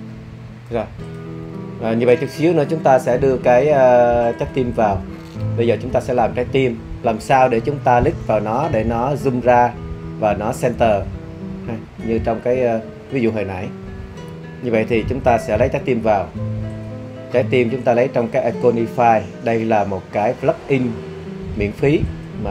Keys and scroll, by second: 3.3 BackSpace, 4.8 BackSpace.